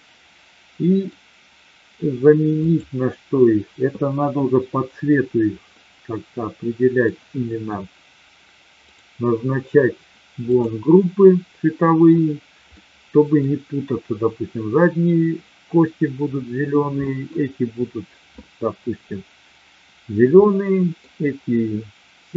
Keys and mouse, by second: 2.6 click, 5.6-7.0 middle drag, 12.8-13.4 middle drag, 17.0 middle drag, 20.4-20.9 middle drag.